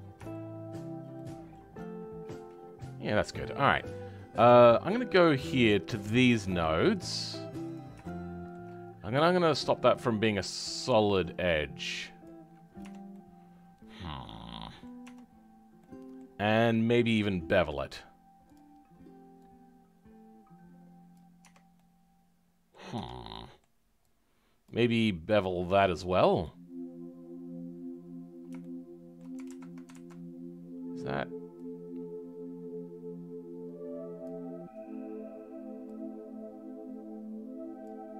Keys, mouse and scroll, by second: 0.3-3.2 shift+middle drag, 3.2 right click, 4.0 scroll up 2, 4.6-5.6 shift+middle drag, 5.6-6.6 scroll up 2, 6.6 click, 7.6 click, 8.0-10.7 shift+middle drag, 10.7-12.5 drag, 12.5-12.8 scroll down 2, 12.8 Tab, 13.1-15.0 middle drag, 15.0 Tab, 15.2-15.8 scroll up 2, 15.8-18.5 middle drag, 18.5 click, 21.7-22.9 right drag, 21.7 middle click, 22.9 Tab, 23.3-24.6 right drag, 23.3 middle click, 24.6 click, 25.3 click, 28.1-28.6 scroll up 2, 28.6-29.9 right drag, 28.6 shift+middle click, 29.9 ctrl+z, 32.0-38.1 drag.